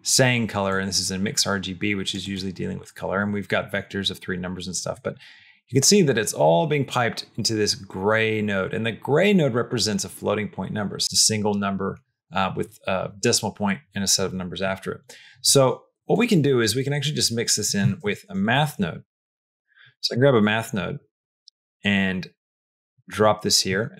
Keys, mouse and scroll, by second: 0.5-2.2 drag, 2.7 click, 3.5 middle click, 4.8 middle click, 15.5 middle click, 16.0 click, 16.7 middle click, 17.6 middle click, 17.8 shift+a.